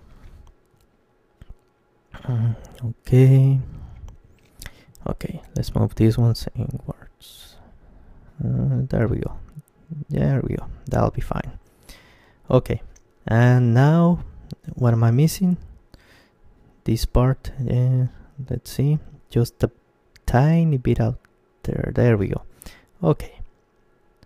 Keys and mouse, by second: 0.2 z, 2.6 KP_3, 3.5-5.3 middle drag, 4.9 g, 6.6 g, 9.7-11.5 drag, 11.0-14.8 middle drag, 14.1 ctrl+KP_3, 15.5 middle click, 15.9-19.8 middle drag, 19.8 g, 21.4-23.6 drag, 22.3 middle click, 23.2-24.2 middle drag.